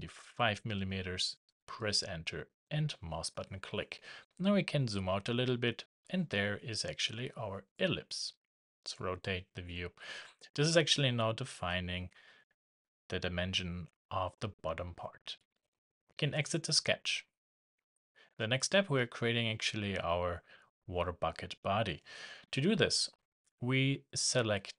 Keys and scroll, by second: 1.7 shift+Return.